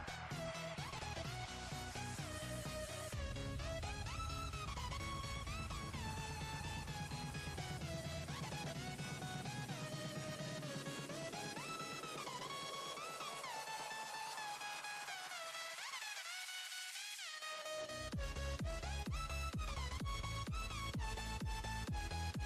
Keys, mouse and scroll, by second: 0.3 alt+shift+click, 2.0 alt+shift+click, 3.8 alt+shift+click, 6.7 shift+click, 7.5 shift+click, 8.8 shift+click, 9.7 shift+click, 10.7 KP_1, 11.3-11.6 scroll up 5, 12.5-13.5 drag, 13.5-14.2 scroll up 3, 15.0 ctrl+b, 20.2 Tab, 20.6 scroll down 3, 21.5 click, 22.1-22.4 scroll down 6.